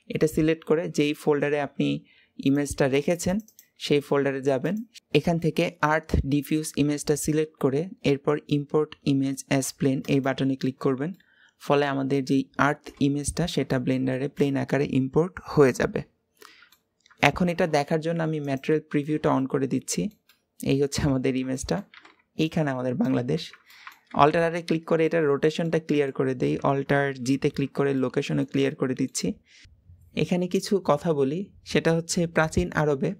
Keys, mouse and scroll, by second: 10.9-12.7 middle drag, 12.7-13.3 scroll up 3, 13.5-17.3 shift+middle drag, 19.8-20.9 middle drag, 20.9-21.4 scroll up 3, 21.4-24.1 shift+middle drag, 24.1 alt+r, 24.5-24.9 scroll down 3, 24.9-26.1 middle drag, 26.1-27.1 scroll up 2, 27.1 alt+g, 27.8-29.6 middle drag.